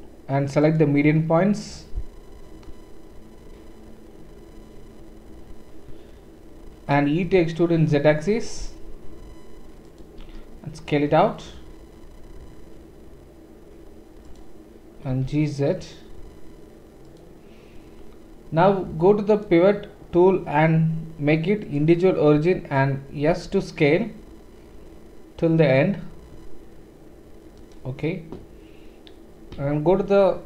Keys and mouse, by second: 7.2 e, 10.0-19.3 middle drag, 10.2 s, 15.1 g, 19.3-27.7 drag, 22.4 d, 23.3 s, 27.7-30.4 middle drag, 30.1 shift+z.